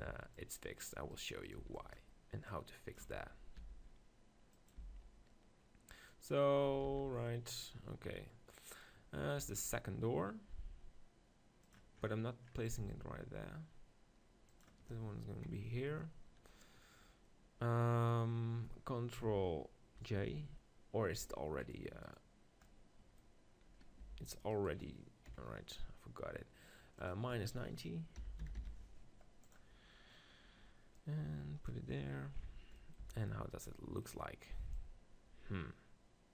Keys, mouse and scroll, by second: 0.1-2.3 right drag, 0.3-2.2 drag, 1.6 b, 2.3-4.2 drag, 2.5 right click, 3.1 Tab, 3.6 r, 4.8 g, 7.0 ctrl+z, 9.4 r, 12.0-13.2 middle drag, 12.8 g, 14.6-16.1 drag, 17.0-21.1 middle drag, 19.9 ctrl+j, 21.6-22.9 drag, 22.9-24.1 middle drag, 24.1 g, 24.7-26.3 drag, 25.3 KP_7, 27.0-28.9 drag, 30.1 middle click, 31.0-33.0 drag, 33.0 middle click, 33.0 z, 34.7-36.3 drag.